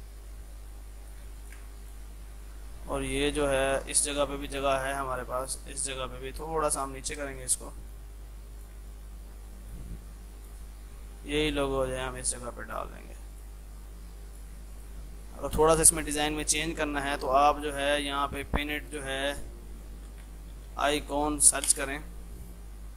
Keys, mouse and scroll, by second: 1.7 c, 1.9 click, 4.3 ctrl+q, 4.4-7.3 drag, 7.3 space, 7.4-12.1 drag, 12.1-13.4 ctrl+right drag, 13.4 click, 17.3 scroll up 1, 17.7 click, 19.9-21.3 typing.